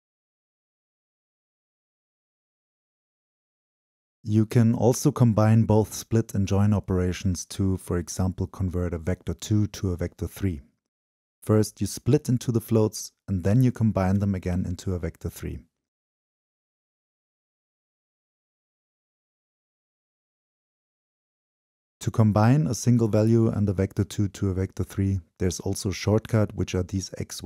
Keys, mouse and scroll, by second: 2.7 right click, 2.9 right click, 3.1 right click, 6.0-6.5 scroll down 2, 7.2-9.4 drag, 9.9-11.2 drag, 16.6-18.0 drag, 18.0-18.9 middle drag, 18.9-19.4 drag, 19.4-20.3 middle drag, 23.3-24.1 right drag.